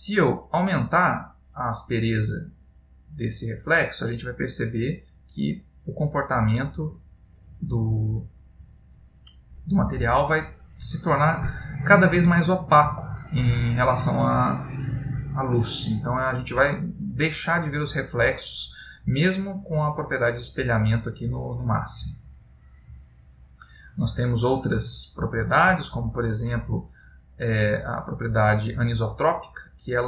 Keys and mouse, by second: 0.1 click, 12.8 click, 21.0 click, 25.0 click.